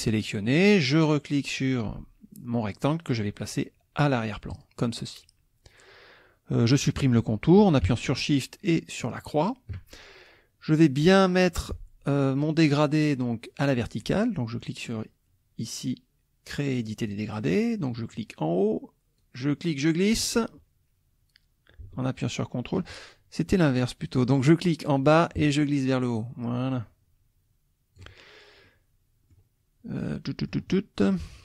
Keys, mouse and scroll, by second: 0.5 click, 4.5 click, 9.1 shift+click, 17.1 click, 19.2-23.0 drag, 25.0-28.2 drag, 28.6 click, 30.0 click.